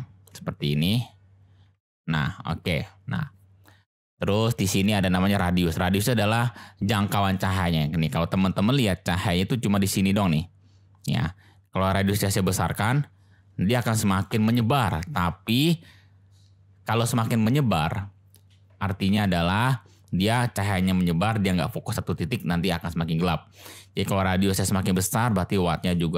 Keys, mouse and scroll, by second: 0.6-1.1 drag, 1.6 g, 1.7 z, 2.2 click, 8.4-8.8 middle drag, 12.3-14.2 drag, 25.1-26.1 drag.